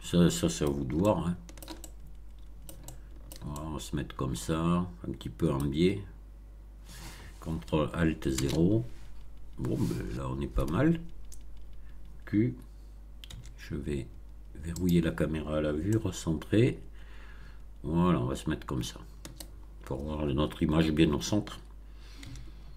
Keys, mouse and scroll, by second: 0.9-3.4 shift+middle drag, 3.5-5.7 shift+middle drag, 6.1 scroll down 1, 8.2 0, 13.2 q, 14.7 click, 15.8-19.5 shift+middle drag, 22.2 q.